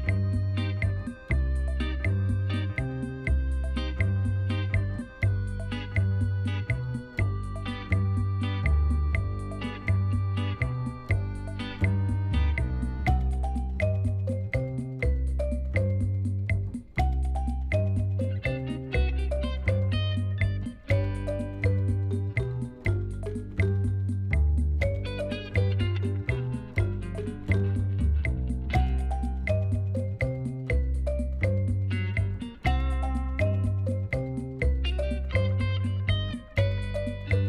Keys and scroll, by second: 2.3 shift+r, 3.1 ctrl+z, 3.5 shift+r, 16.9 ctrl+r, 18.9 Return, 20.7 Escape, 21.2 ctrl+b, 24.0 ctrl+b, 26.5 3, 26.8 alt+a, 30.5 e, 36.8 ctrl+b.